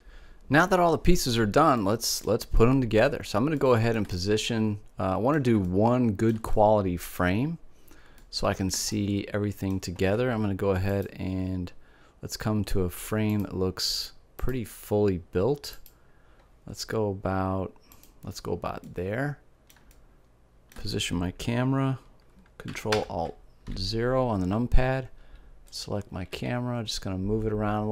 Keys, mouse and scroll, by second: 8.3 middle click, 12.5 click, 13.3-17.4 drag, 18.8 middle click, 22.9 ctrl+alt+KP_0, 25.8-27.6 drag, 26.5 g.